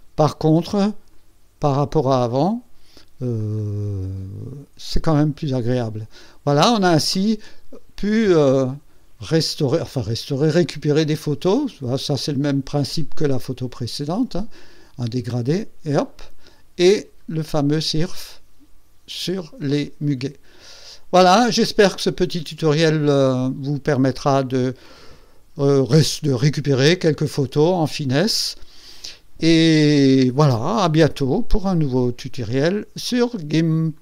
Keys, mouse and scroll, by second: 1.1 click, 3.3 click, 4.4 scroll down 2, 5.2 scroll up 2, 5.6 scroll down 2, 7.6 scroll down 2, 8.3 scroll down 2, 9.3 scroll down 2, 10.5 scroll down 2, 11.9 scroll up 2, 12.4 scroll down 2, 13.1-13.6 scroll up 4, 14.2 scroll down 2, 15.2 scroll down 2, 16.1-16.4 scroll down 4, 17.1 scroll down 2, 17.9 scroll up 2, 18.5 scroll down 2, 20.3 scroll down 1, 21.1 scroll up 1, 22.8 click, 32.5 right click, 33.9 click.